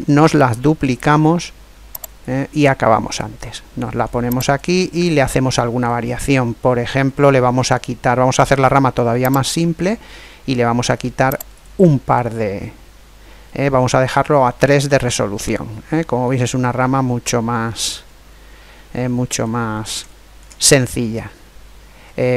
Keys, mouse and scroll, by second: 2.0-3.6 drag, 3.2-4.3 middle drag, 4.3 right click, 6.2 middle click, 9.3 click, 11.3 click, 13.3-16.6 middle drag, 19.9-22.1 middle drag, 21.7-22.2 scroll up 1.